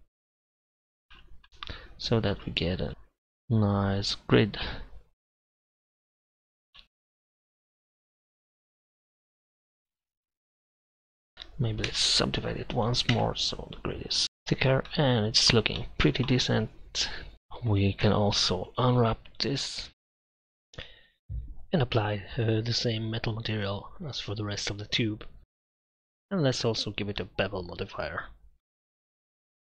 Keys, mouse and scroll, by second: 0.4 z, 2.9 click, 7.3-8.3 drag, 9.4-10.2 middle drag, 10.2 KP_Divide, 10.6-11.3 drag, 11.3 Tab, 11.9 w, 13.1 Tab, 16.0-17.3 middle drag, 17.8 right click, 18.0 Tab, 18.9 a, 19.2 a, 19.9 u, 20.6 Tab, 21.5 right click, 21.8 KP_Divide, 22.4 click, 23.4 click, 24.8 middle click, 25.2 click, 25.6 click, 26.2 m, 26.5 click, 26.9 shift+a, 29.6 m.